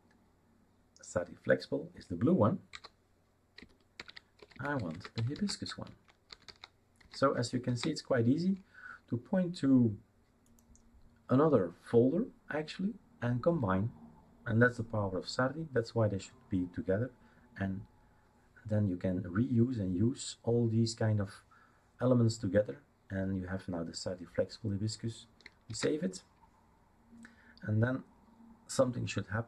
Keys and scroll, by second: 2.9 typing, 4.0-6.9 typing, 7.7 ctrl+s, 25.7 ctrl+s.